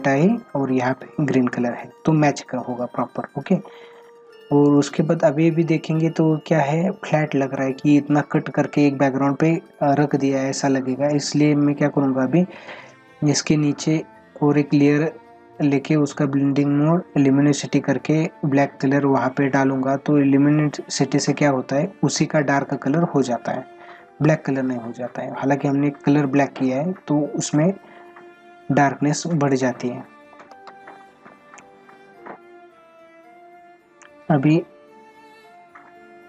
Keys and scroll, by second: 30.6 ctrl+alt+z.